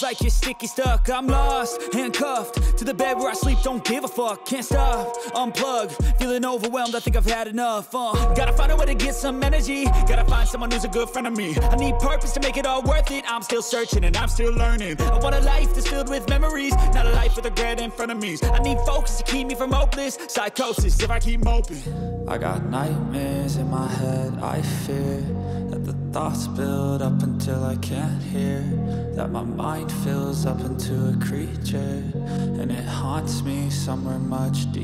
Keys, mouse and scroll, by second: 5.1 ctrl+z, 5.1 middle click, 5.1 right click, 5.1 2, 5.5 shift+click, 5.5 shift+right click, 6.1 f, 6.6 middle click, 7.9 middle click, 9.3 middle click, 9.3 right click, 10.1 shift+right click, 10.4 middle click, 10.9-11.3 scroll down 1, 13.3 click, 14.6-18.8 drag, 19.2 shift+middle click, 21.7-22.4 scroll down 1, 22.4-23.6 middle drag, 24.0 shift+middle click, 25.5 click, 27.1 click, 28.3 g, 32.0 right click, 32.0 3, 32.4 click, 32.4 right click.